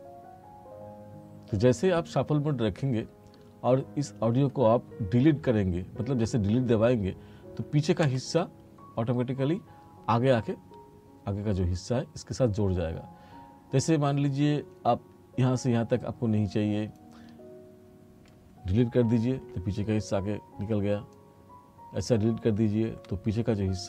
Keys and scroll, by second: 8.1 Delete, 19.4 Delete, 22.9 Delete.